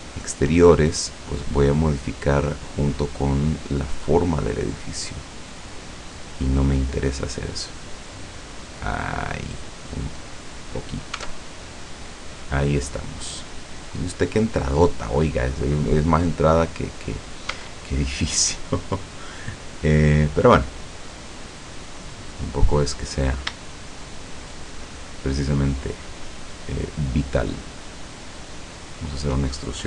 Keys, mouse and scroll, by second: 0.3 shift+right click, 0.7-1.5 shift+scroll down 2, 1.7 middle click, 1.7-2.7 scroll up 3, 2.9 middle click, 3.9 scroll down 2, 4.4-6.5 middle drag, 6.7 scroll up 2, 7.7-10.5 drag, 10.7 scroll down 2, 11.2 Tab, 11.7-14.0 middle drag, 14.7-15.1 scroll down 2, 15.2-15.6 scroll up 2, 17.5 Tab, 23.1 right click, 24.4 shift+right click, 25.8 shift+right click, 26.5 shift+right click, 28.1 shift+right click, 28.9 shift+right click.